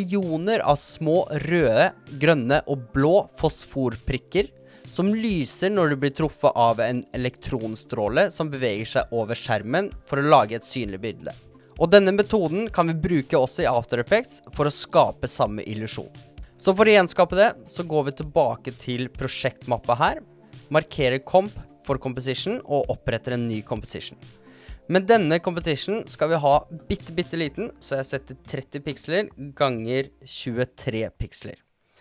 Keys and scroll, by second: 27.4 3, 27.9 0, 28.7 Tab, 29.4 2, 29.9 3.